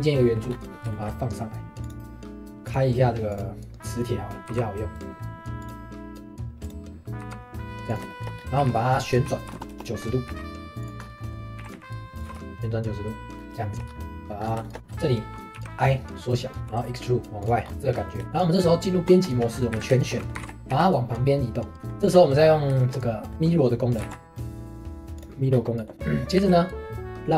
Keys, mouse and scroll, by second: 0.5-0.9 scroll up 3, 0.9 shift+middle click, 1.8-4.3 drag, 5.6-6.7 drag, 7.2 g, 8.1 shift+middle click, 8.3 scroll up 1, 8.4 d, 11.0 scroll up 2, 11.2 middle click, 11.6 s, 13.2 shift+middle click, 13.3-14.2 scroll up 2, 13.6 shift+middle click, 14.2 middle click, 14.4-15.5 scroll up 3, 14.6 shift+middle click, 14.8 click, 15.5 i, 17.6 scroll down 1, 17.7 shift+middle click, 18.6 Tab, 19.3 shift+middle click, 19.5 scroll up 2, 19.7 a, 20.0 shift+middle click, 20.3 g, 21.8 Tab, 22.1-22.5 scroll down 1, 22.5-22.8 scroll up 1, 22.8-24.0 shift+middle drag, 24.0 alt+x, 25.2 click, 25.5 scroll down 1, 25.8 shift+middle click, 26.4 shift+s.